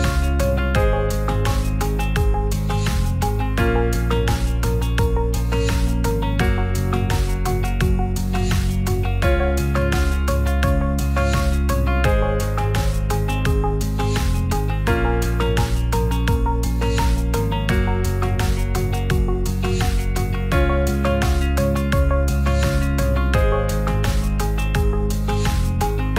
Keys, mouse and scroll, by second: 2.9 right click, 3.3-4.4 drag, 4.6 click, 4.8 middle drag, 5.6 shift+middle drag, 5.9 middle drag, 7.1 Tab, 7.3 shift+middle drag, 7.6 middle click, 8.0 drag, 8.3 shift+middle click, 8.8 Tab, 9.5 s, 9.7 z, 10.5 click, 10.8 click, 11.0 c, 12.8 click, 14.9 s, 15.2 shift+z, 16.4 click, 16.7 Tab, 16.9 middle click, 18.6 click, 18.8 middle click, 19.7 shift+middle drag, 20.5 middle click, 20.9 Tab, 21.2 click, 21.4 c, 22.8 s, 22.9 z, 24.1 click, 24.2 g, 24.3 z, 25.3 click, 26.0 click.